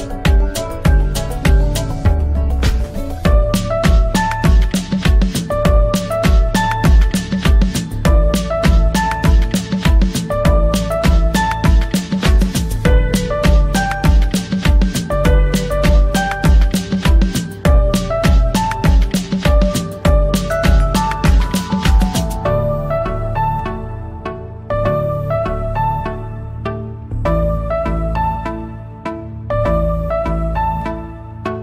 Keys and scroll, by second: 0.7 F4, 1.2 Escape, 2.6 c, 2.9 Escape, 8.5 F3, 9.0 ctrl+z, 9.4 Escape, 10.6 shift+Page_Up, 11.7 c, 12.0 Escape, 13.6 c, 14.0 Escape, 14.3 F2, 16.9 shift+Page_Up, 18.6 Escape, 22.7 Escape, 27.2 Escape.